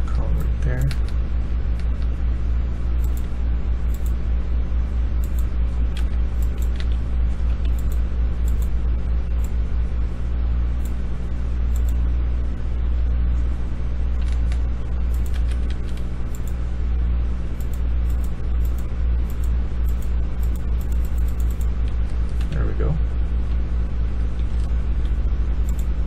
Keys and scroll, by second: 0.9-3.1 w, 5.9 Escape, 6.3-7.4 typing, 14.1-14.8 d, 15.2 Escape, 15.6 Escape, 21.7 Escape, 22.3-23.4 a, 24.1 w, 24.4-24.9 q.